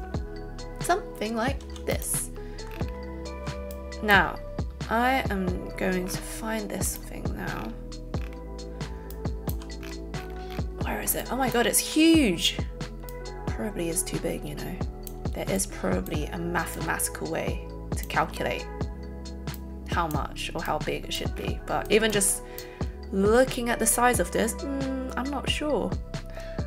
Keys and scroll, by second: 1.7 a.